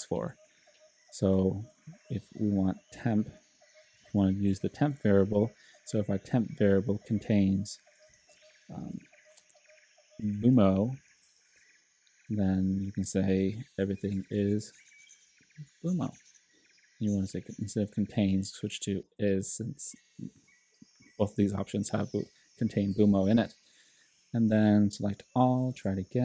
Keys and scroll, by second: 3.6-5.3 typing, 8.1 b, 8.9 BackSpace, 10.0-11.5 typing, 13.7-16.4 typing, 25.2 super+a, 26.1 shift+super+t.